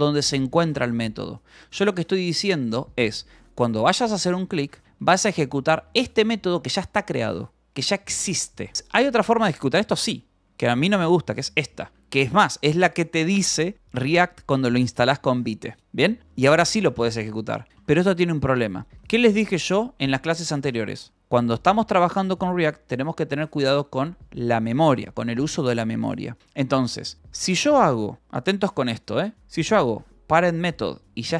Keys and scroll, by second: 1.6-4.8 typing, 4.3 Escape, 5.8 v, 6.4 Escape, 8.7 h, 9.9-12.2 typing, 11.6 Escape, 16.3 Escape, 16.6 j, 17.6-20.3 typing, 18.2 Escape, 21.7 Right, 26.4 Escape, 29.3-30.8 typing.